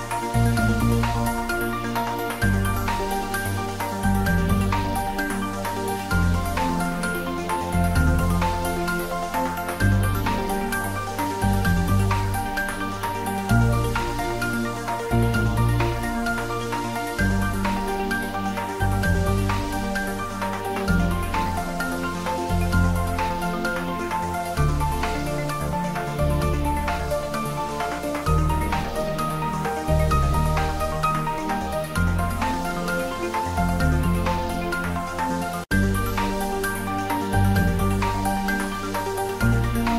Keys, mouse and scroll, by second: 1.5 ctrl+s, 1.7 ctrl+middle click, 2.2 shift+middle click, 2.6-5.9 ctrl+middle drag, 5.9 ctrl+s, 12.6 ctrl+Num_Lock, 12.8 ctrl+s, 13.0 shift+middle click, 13.6 ctrl+s, 15.6 click, 16.3 shift+right click, 17.2 click, 17.9 shift+middle click, 18.5-19.4 typing, 19.8-21.0 shift+middle drag, 21.0 shift+a, 22.8 click, 23.9 s, 25.0 click, 25.3 middle click, 25.8-26.7 typing, 26.6 click, 27.7 shift+middle click, 28.1 ctrl+middle click, 28.4-30.9 typing, 29.6 click, 30.4 click, 30.6 shift+middle click, 31.1 Tab, 32.5 1, 33.0 click, 33.7 shift+click, 34.9 alt+m, 35.6 click, 36.1 middle click, 36.7 ctrl+z, 38.3 click, 38.8 ctrl+z.